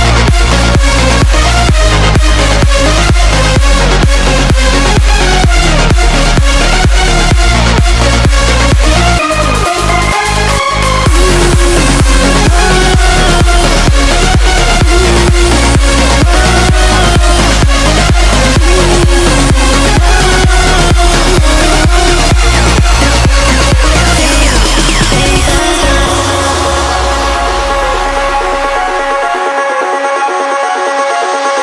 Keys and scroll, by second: 0.0-0.3 typing, 4.2-4.9 typing, 25.4 ctrl+z.